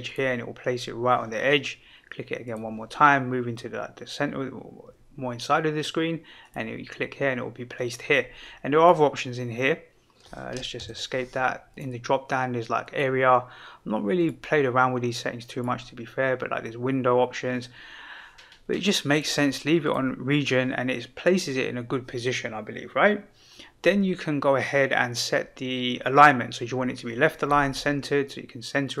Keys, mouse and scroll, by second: 0.0 click, 2.4-6.5 drag, 8.7 click, 11.7-13.1 drag, 14.1-15.7 drag, 19.1-20.0 drag, 27.7-29.0 drag.